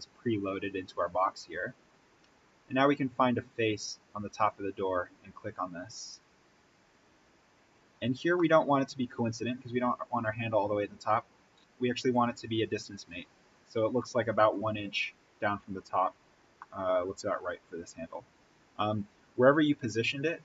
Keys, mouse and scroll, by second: 1.3-1.7 scroll down 1, 4.4 click, 5.7-6.1 scroll up 1, 8.3-12.1 middle drag, 12.1 click, 14.5 Tab, 16.5 middle click, 17.4-19.7 scroll up 1.